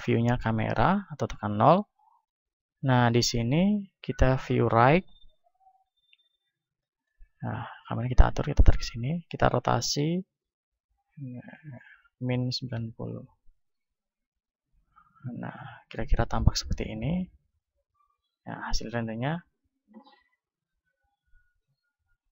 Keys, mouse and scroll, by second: 1.9-4.6 middle drag, 4.6-6.9 drag, 7.8-9.5 drag, 9.5 r, 12.7-14.7 drag, 13.8 z, 15.0-16.8 drag, 19.2 F12.